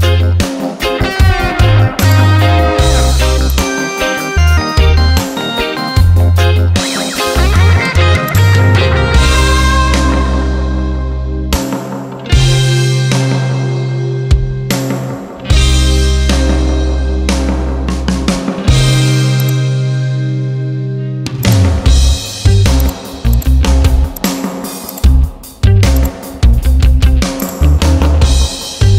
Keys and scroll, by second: 5.5 ctrl+t, 13.2 Return.